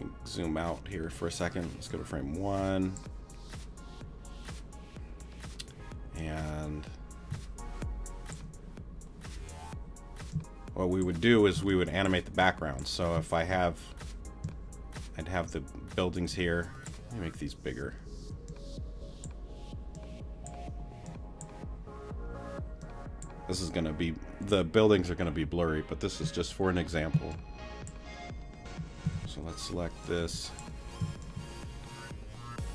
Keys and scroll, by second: 18.2 w, 29.1 super+a, 31.0 shift+t.